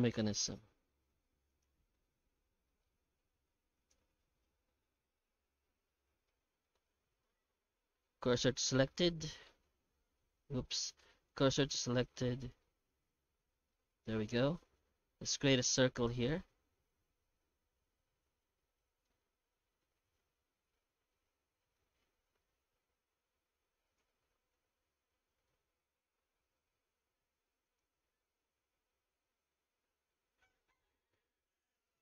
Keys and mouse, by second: 0.0 alt+h, 0.3-0.9 middle drag, 1.1 h, 1.5 right click, 1.7 Tab, 2.0 middle click, 2.7 shift+middle click, 3.2 Tab, 3.7 right click, 4.1 Tab, 6.3 middle click, 7.2 shift+s, 8.9-10.3 middle drag, 10.5 Tab, 11.0 shift+s, 11.7 shift+s, 12.9-13.7 middle drag, 14.1 shift+a, 16.7 1, 18.4-19.1 middle drag, 19.3 Tab, 20.5 1, 20.9 w, 22.1 shift+q, 22.8 q, 24.5 f, 25.1 middle click, 26.1 i, 30.2-32.0 typing, 31.9 right click.